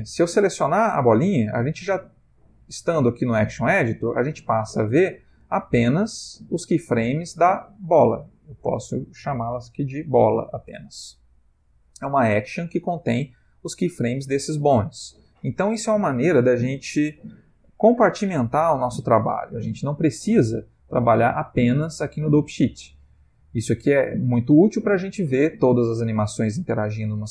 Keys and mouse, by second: 0.5 click, 8.3 click, 21.4 click.